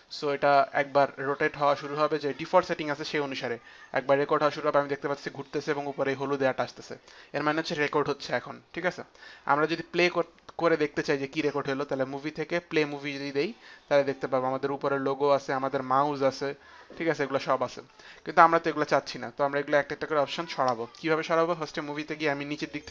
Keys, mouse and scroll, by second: 11.8 click, 12.8 click, 21.5 click.